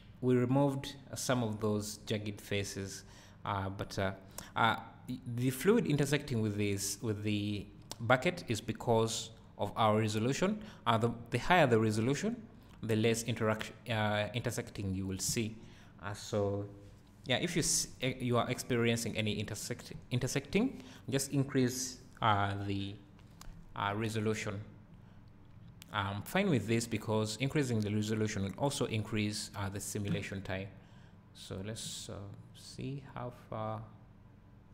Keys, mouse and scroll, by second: 0.0 scroll up 1, 2.6 scroll down 1, 32.8-34.7 right drag.